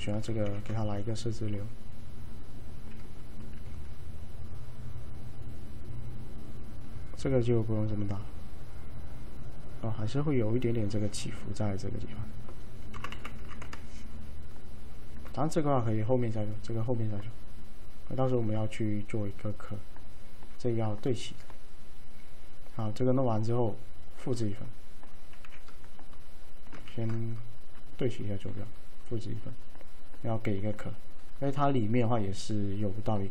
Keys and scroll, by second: 0.6 s, 3.6 alt+f, 12.8-14.7 typing, 20.0-20.8 typing, 25.5 w, 27.0 ctrl+shift+a.